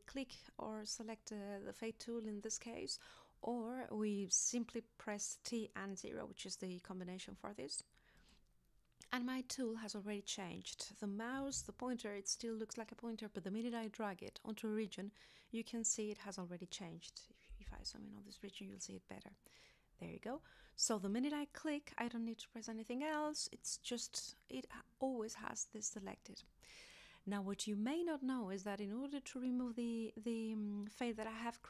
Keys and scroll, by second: 17.7 z.